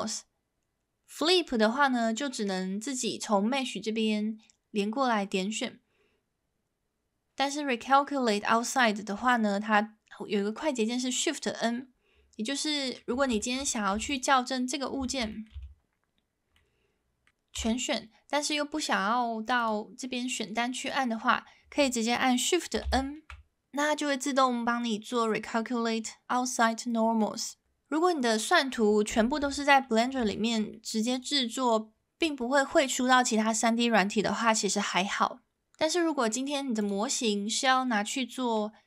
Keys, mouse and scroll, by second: 12.8 middle click, 13.4 shift+middle click, 13.9 Tab, 14.1 click, 15.0 shift+middle drag, 15.3 middle drag, 16.5 middle click, 17.6 a, 19.6-20.9 drag, 22.8 shift+n, 29.4 Tab, 30.3 shift+middle drag, 30.7 middle drag, 31.1 click, 36.8 click, 37.3-38.6 middle drag.